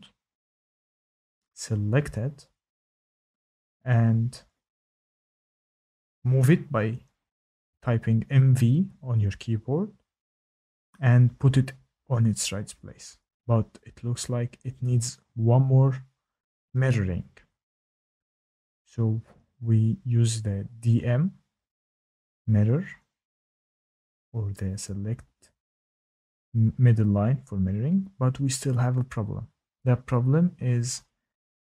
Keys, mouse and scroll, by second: 4.3 click, 5.7 click, 7.6-8.0 typing, 9.8 click, 10.8-12.1 scroll, 12.1-12.5 scroll, 12.5 click, 13.2-14.8 scroll, 14.8-15.7 scroll, 15.7 click, 19.5 shift+right click, 25.0 Escape, 25.6 click, 26.5 Delete, 27.1 scroll up 2, 30.7 shift+middle click.